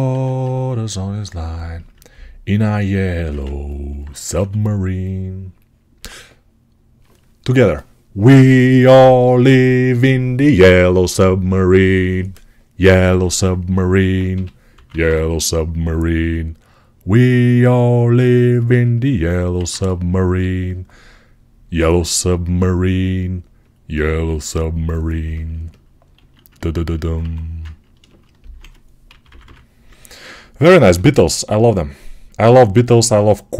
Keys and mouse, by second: 0.0 1, 1.7-13.7 alt+right drag, 4.2 2, 14.2 g, 14.6 ], 14.8 ], 19.1-26.4 alt+right drag, 19.4 alt+q, 26.1 alt+q, 27.1 1, 27.9 alt+right click, 28.1 alt+right click, 28.9 [, 29.1 [, 30.8 g.